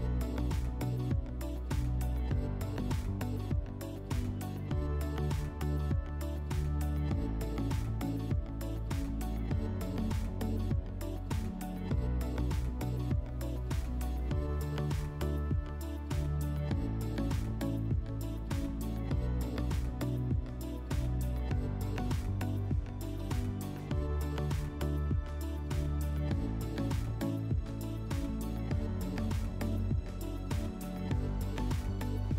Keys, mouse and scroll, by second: 0.0 click, 0.5-1.4 typing, 1.6 Return, 4.1 click, 5.4 click, 5.9-6.8 typing, 7.0 Return, 9.7 click, 14.4-16.1 drag, 19.1-21.6 drag, 22.2 middle click, 23.8 click, 24.6 click, 25.6-27.1 drag, 27.5-29.1 drag, 30.7-32.2 drag.